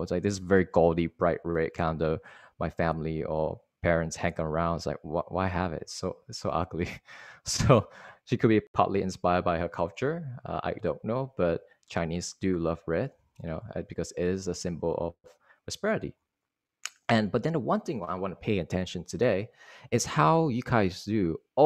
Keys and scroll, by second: 16.7 Right.